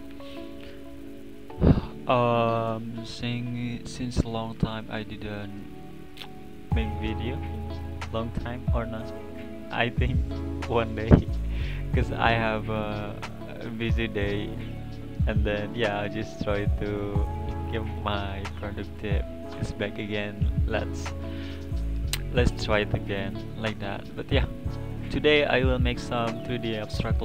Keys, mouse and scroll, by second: 0.2-0.5 scroll down 3, 0.5-4.1 middle drag, 5.4-10.6 middle drag, 12.3 click, 16.6-17.2 scroll down 3, 17.4 click, 17.8 scroll up 2, 22.9-23.6 middle drag, 23.6 scroll down 1, 23.9-24.5 middle drag, 24.5 click, 24.8 scroll up 1, 25.8-27.2 middle drag.